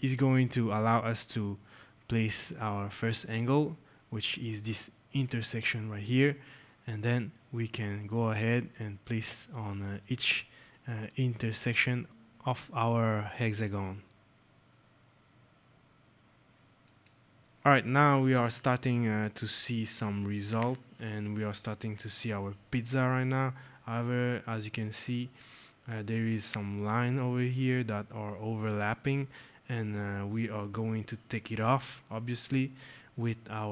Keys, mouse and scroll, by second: 5.1 click, 11.5 click, 13.4 click, 16.7 shift+click, 23.4 scroll, 23.9 right click, 24.1 middle click, 25.2-25.5 scroll, 26.3 scroll, 29.8 scroll, 31.2 scroll, 33.3 right click.